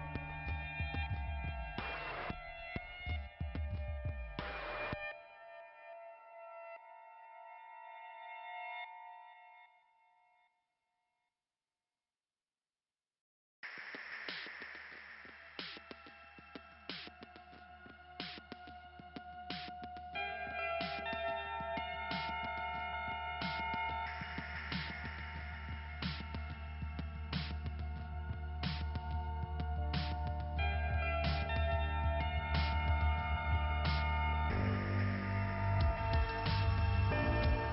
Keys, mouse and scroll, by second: 4.2 middle click, 11.1 scroll down 2, 13.9-14.2 scroll down 2, 14.2 scroll up 1, 16.3 middle click, 17.4-18.0 scroll down 1, 20.3 click, 21.4 click, 22.4 click, 22.6 click, 23.3-24.8 scroll up 1, 24.9 click, 27.5 click, 28.0 click, 28.5 click, 30.2 right click, 31.5 right click, 31.8 click, 33.5 click, 35.9 click, 36.7 click, 37.3 scroll down 2, 37.6 ,.